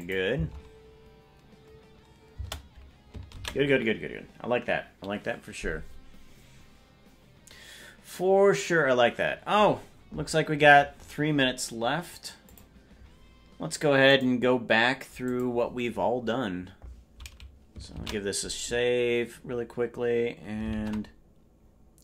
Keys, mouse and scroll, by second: 0.0 click, 0.3 space, 2.5 space, 6.6 ctrl+s.